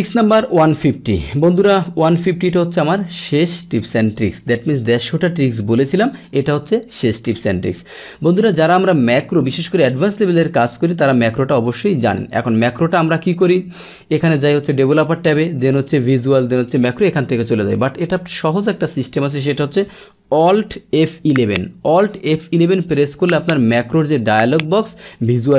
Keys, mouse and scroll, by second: 8.0-8.7 scroll down 1, 8.7-9.9 scroll down 1, 9.9-10.6 scroll down 1, 10.8 click, 12.0 click, 14.7 click, 18.5 click, 19.1 click, 21.0 alt+F11.